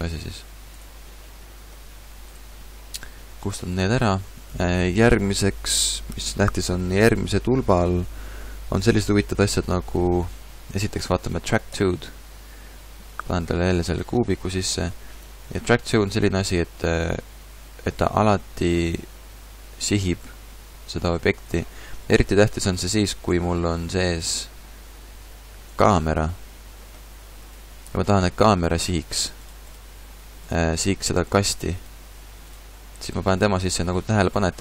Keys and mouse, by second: 1.2 right click, 2.2-3.4 middle drag, 3.4-6.3 drag, 3.4 right click, 13.1-14.7 drag, 14.7-18.6 middle drag, 15.4 g, 21.5 right click, 21.8-23.2 middle drag, 23.2-24.4 drag, 23.3 shift+a, 26.5 g, 27.5-31.5 drag, 31.8-34.3 drag, 34.3-34.6 middle drag, 34.3 g.